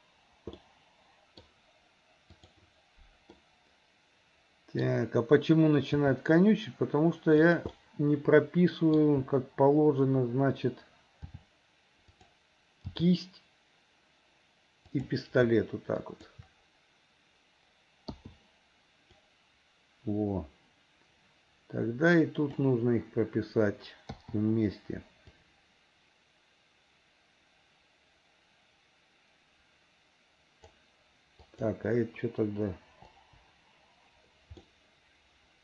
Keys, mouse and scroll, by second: 0.7 middle click, 2.4 click, 3.4-4.9 middle drag, 5.9 g, 7.8-9.0 middle drag, 11.4 r, 12.9 g, 16.0 shift+click, 19.3-22.7 drag, 25.4-30.8 drag, 31.4 click, 33.2 Delete, 34.6-35.6 middle drag.